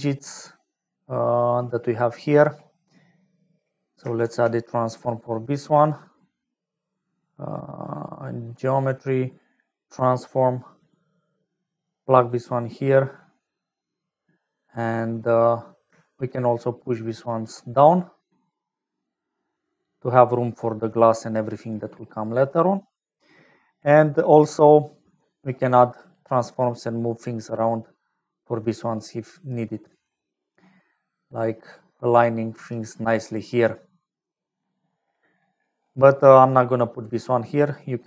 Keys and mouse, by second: 0.2 middle click, 0.8 middle click, 2.0 middle click, 3.1 middle click, 4.2 shift+a, 16.3 shift+middle click, 18.0-20.8 middle drag, 22.0 middle click, 22.9 middle click, 24.7-25.7 middle drag, 26.3 middle click, 27.8 middle click, 28.0 middle click, 28.1 middle click, 28.4 middle click, 28.4 click, 28.6-30.0 middle drag, 30.8 middle click, 32.2 middle click, 32.7 click, 32.9 middle click, 33.9 middle click, 34.1 click, 34.3 middle click, 34.8 middle click, 36.7 middle click, 37.7-38.0 middle drag.